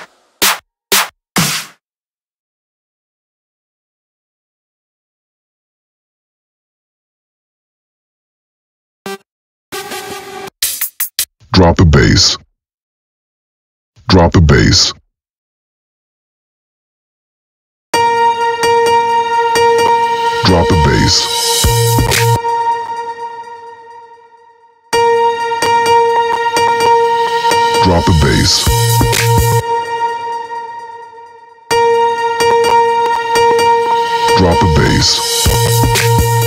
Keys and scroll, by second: 17.3 space, 21.7 space, 24.5 space, 29.0 space, 31.1 space.